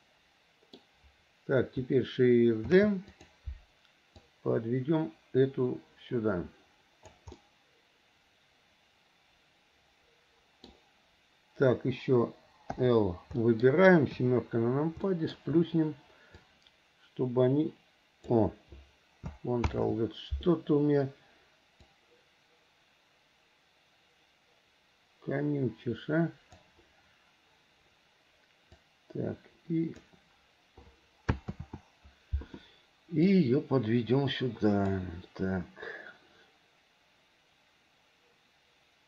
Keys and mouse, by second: 2.9 shift+d, 4.4-7.3 drag, 7.5-10.9 middle drag, 12.9 l, 13.6 middle click, 14.3 KP_7, 15.2 shift+middle click, 16.7-18.5 drag, 19.9 ctrl+z, 22.0-26.7 drag, 28.9-30.3 drag, 31.7 ctrl+z, 33.4 click, 33.7-35.1 drag.